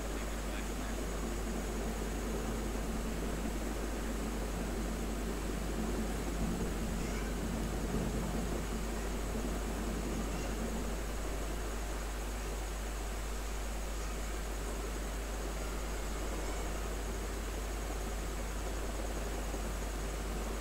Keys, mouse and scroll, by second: 6.7 space, 8.7-11.1 drag, 11.1-14.2 drag, 14.2 space, 14.5-19.2 drag, 19.2 space, 19.5 click, 19.7 space.